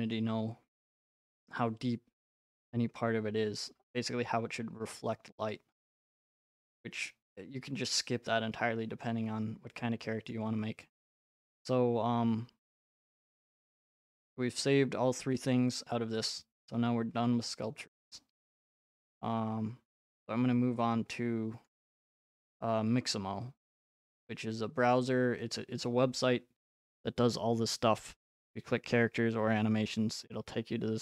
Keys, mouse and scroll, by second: 0.1 right click, 4.6-6.7 scroll, 6.7 right click, 6.7-7.1 scroll, 9.0-10.2 scroll, 10.3 right click, 10.4-11.1 scroll, 11.1 scroll, 12.4-13.2 scroll, 28.2-29.9 drag.